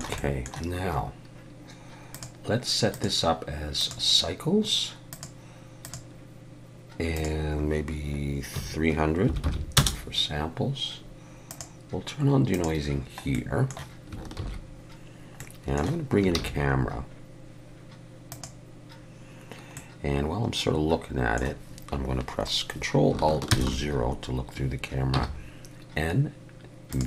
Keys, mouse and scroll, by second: 0.2 middle click, 2.1 click, 2.9 click, 5.1 click, 7.2 click, 9.4 0, 11.5 click, 12.6 click, 13.3 middle click, 14.4 ctrl+s, 15.4 middle click, 16.3 shift+a, 19.7 middle click, 23.5 ctrl+alt+KP_0, 25.1 n, 26.9 click.